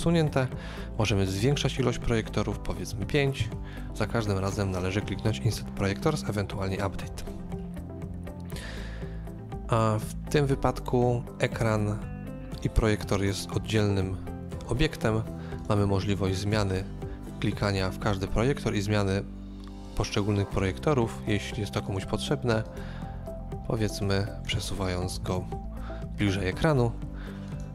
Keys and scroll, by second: 2.9 KP_5, 4.8 typing, 25.1 KP_5, 25.3 Return.